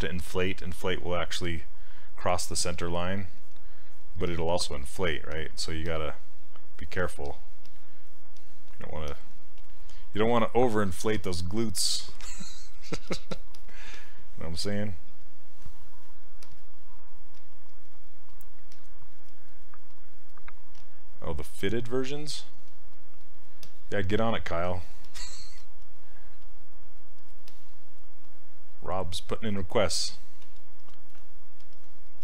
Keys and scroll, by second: 2.4 s, 17.4 s, 20.8 s, 25.6 s.